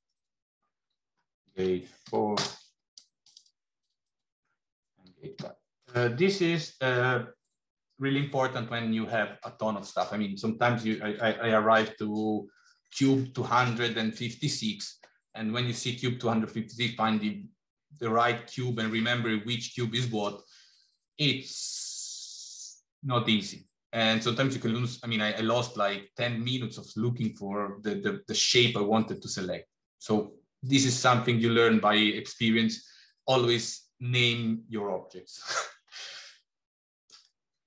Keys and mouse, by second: 0.8-3.4 shift+drag, 3.6 click, 3.9-6.5 drag, 36.1 middle click.